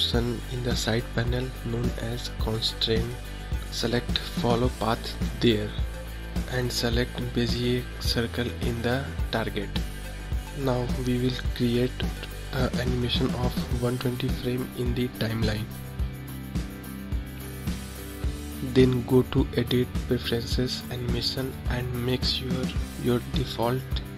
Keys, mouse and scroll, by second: 0.2 click, 1.0-4.0 drag, 5.3-8.4 drag, 10.0-15.3 drag, 18.1-21.2 drag.